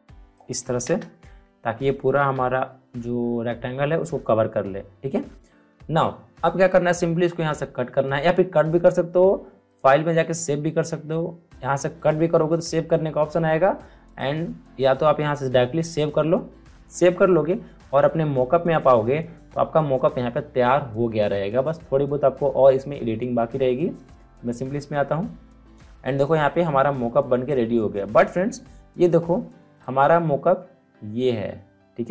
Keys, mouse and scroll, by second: 0.8 Return, 9.6 click, 9.7 click, 11.9 click, 24.4 click, 29.7 click.